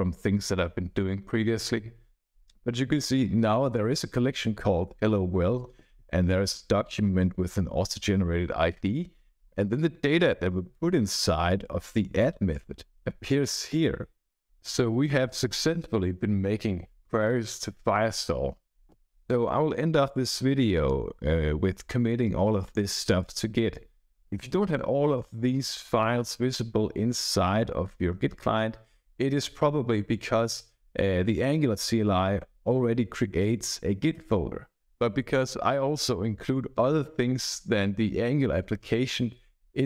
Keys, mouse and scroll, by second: 35.5-36.3 scroll up 3.